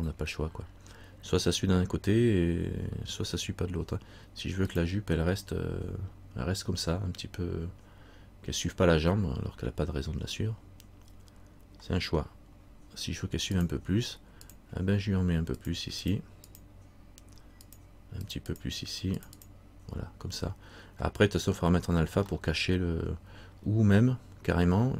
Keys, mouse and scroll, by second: 13.7 click, 15.7-22.4 click, 22.5 middle click, 24.1 scroll up 1.